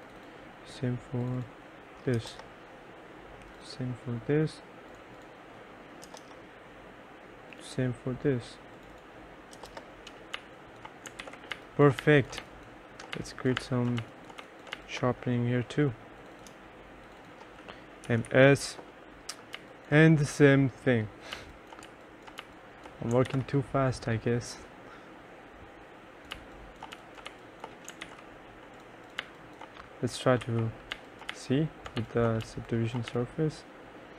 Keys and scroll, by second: 2.3 0, 2.4 Return, 6.2 0, 6.3 Return, 9.7-15.4 typing, 9.8 Return, 11.4 ctrl+s, 18.0-19.7 typing, 22.0 3, 22.6 2, 23.4 ctrl+z, 26.5 2, 27.1 3, 27.4 1, 28.2 ctrl+s, 29.3-33.2 typing.